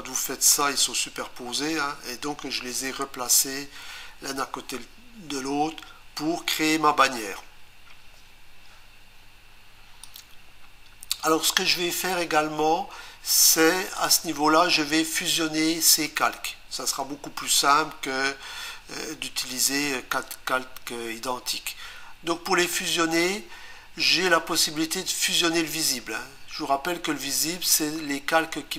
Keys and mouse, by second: 10.1 click.